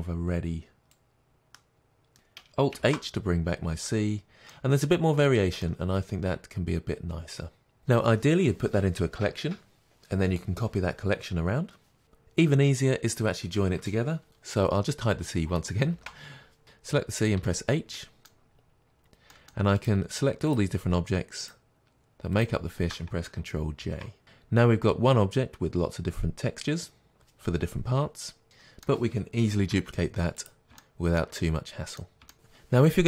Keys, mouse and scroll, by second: 2.9 alt+h, 3.5-3.9 scroll down 2, 3.9-16.6 middle drag, 5.3-5.7 scroll down 2, 16.6 click, 17.4 h, 18.0-19.9 middle drag, 18.6-19.4 scroll up 2, 19.9 click, 20.6 shift+click, 23.9 ctrl+j, 28.4-33.0 middle drag, 29.7 shift+d.